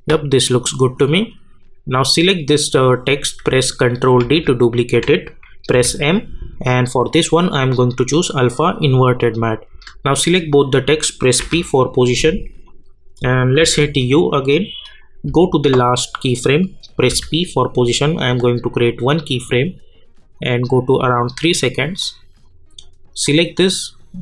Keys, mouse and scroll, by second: 4.2 ctrl+d, 5.7 m, 7.6 click, 11.4 p, 12.6 click, 13.6 u, 15.3 k, 17.1 p, 18.8-24.2 drag.